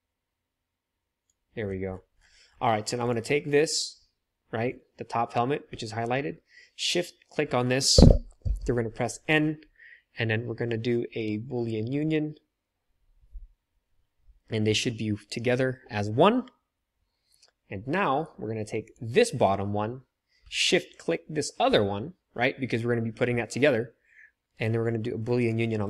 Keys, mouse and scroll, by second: 3.1-12.0 middle drag, 8.4 n, 12.0-18.9 drag, 18.9-20.9 middle drag, 20.9 shift+click, 21.0-25.5 shift+middle drag, 25.5-25.8 drag.